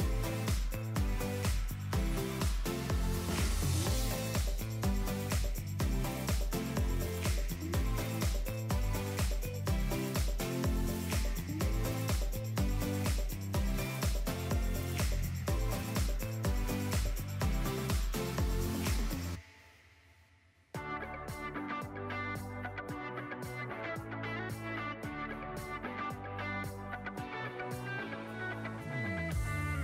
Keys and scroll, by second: 0.2 shift+x, 1.4 shift+x, 2.6 shift+x, 4.4 j, 5.4 f, 6.2 ctrl+z, 6.9 shift+x, 9.1 f, 9.7 ctrl+z, 10.1 g, 12.4 shift+x, 13.6 shift+x, 15.0 j, 19.5 alt+q, 21.2 j, 24.2 j, 29.0 shift+x.